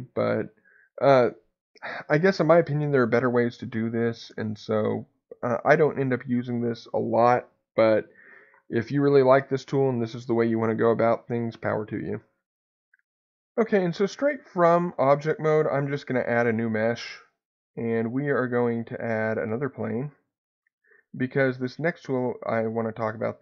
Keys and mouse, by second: 15.7 shift+a.